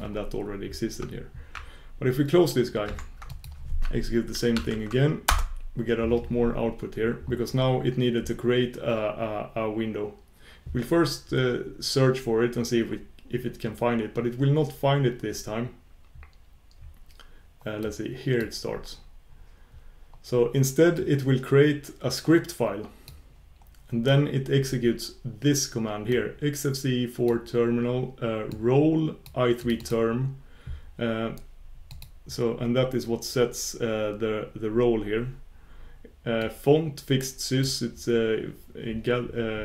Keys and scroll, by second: 4.4 shift+super+q, 5.4 shift+super+q, 31.9 shift+super+q.